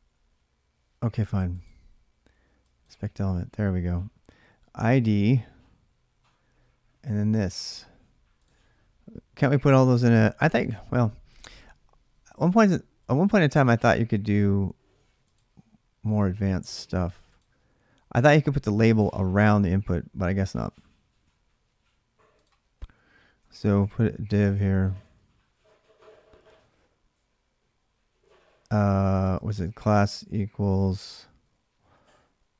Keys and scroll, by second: 24.4-25.3 typing, 29.0-32.5 typing, 31.2 Left.